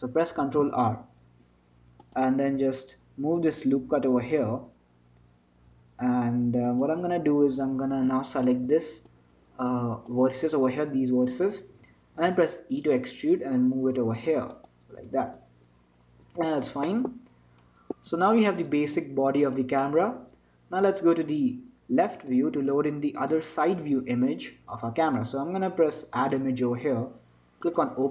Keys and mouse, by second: 0.1 ctrl+z, 0.7 ctrl+r, 8.4 a, 8.8 b, 12.5 e, 16.1-18.5 middle drag, 18.5 Tab, 23.6 click, 26.5-28.1 drag.